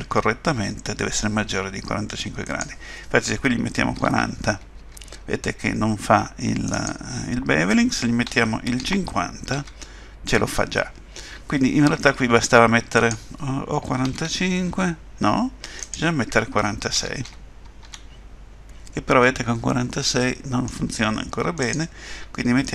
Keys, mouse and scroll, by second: 2.4 click, 6.7 click, 11.2-12.9 scroll up 3, 12.9 click, 15.8 click, 19.2 middle click, 21.6 click.